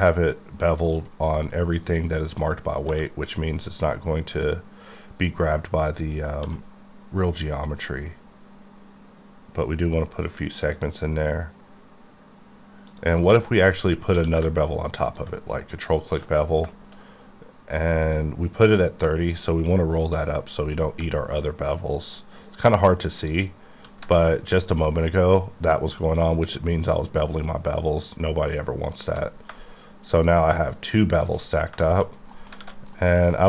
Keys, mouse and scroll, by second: 1.1 click, 1.3-2.9 scroll down 2, 2.9 1, 6.6 1, 9.4-10.6 scroll up 1, 10.6-11.2 scroll up 1, 13.0 click, 13.3 middle click, 13.5-14.2 scroll up 6, 14.2 q, 15.1 ctrl+click, 19.4-20.0 alt+scroll up 6, 20.3-20.6 scroll up 1, 20.9-21.6 shift+scroll up 1, 21.6-22.1 scroll up 1, 24.0 alt+Num_Lock, 24.2-24.9 alt+scroll down 5, 27.1-27.7 scroll up 4, 28.2-29.2 scroll up 3, 31.2 click, 31.6 scroll down 1, 31.9 middle click, 32.2 scroll down 1, 32.5 alt+middle click, 32.6 alt+a, 33.0 middle click.